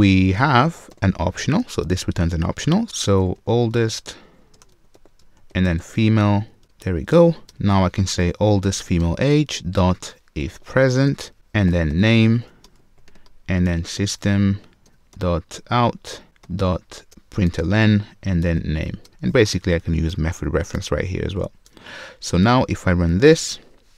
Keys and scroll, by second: 0.9 super+w, 0.9 alt+super+v, 9.0 Return, 14.9 Return, 23.1 alt+Return.